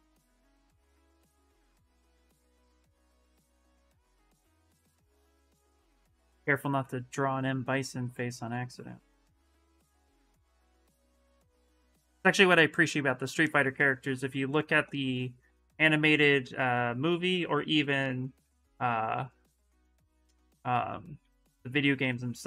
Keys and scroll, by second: 4.9-6.8 typing, 12.2 s, 17.6 s, 20.5 s.